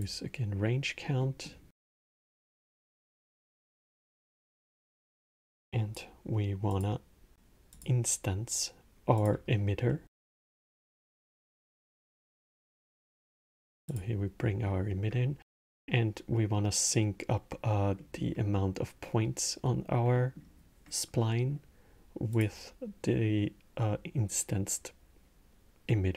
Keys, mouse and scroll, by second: 0.9-4.9 middle drag, 4.9 shift+a, 9.7-12.3 middle drag, 12.3 click, 13.7 click, 14.1-22.1 middle drag, 22.1 click.